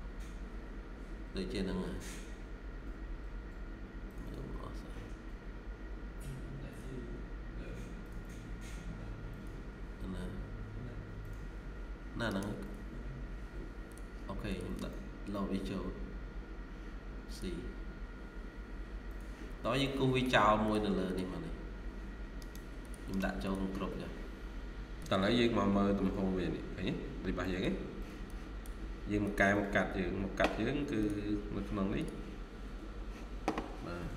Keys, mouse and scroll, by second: 0.0-1.0 ctrl+scroll up 1, 1.0-1.3 ctrl+scroll down 1, 2.8-3.4 scroll up 1, 3.6 ctrl+scroll down 1, 12.2 right click, 19.4 scroll down 1, 19.7 middle click, 20.9 double click, 22.3 right click, 24.9 double click, 25.1 scroll up 1, 27.3 middle click, 32.8-33.8 scroll down 1.